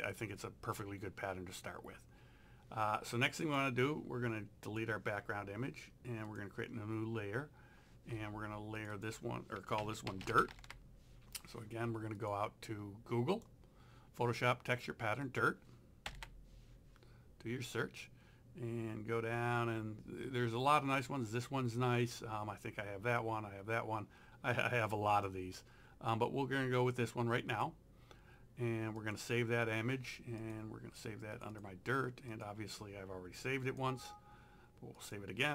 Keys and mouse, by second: 3.5 click, 6.3 click, 8.8 click, 9.6-10.9 typing, 12.2 click, 15.3 click, 16.1 KP_Enter, 25.1 click, 27.5 right click, 29.0 click.